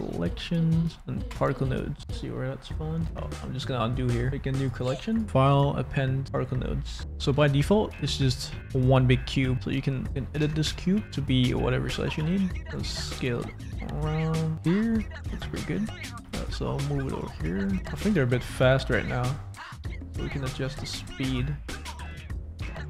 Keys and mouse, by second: 3.1 ctrl+z, 4.5 click, 5.1 click, 5.6 click, 7.0 middle click, 7.7 click, 7.7 middle click, 8.6 click, 8.6 middle click, 9.5 Tab, 10.0 Tab, 10.4 Tab, 11.0 s, 12.6 g, 14.9 click, 15.2 Tab, 15.2 click, 15.9 click, 16.1 space, 16.1 g, 16.1 y, 16.3 x, 17.6 click, 17.7 space, 17.9 space, 18.9 space, 21.2-22.8 shift+drag.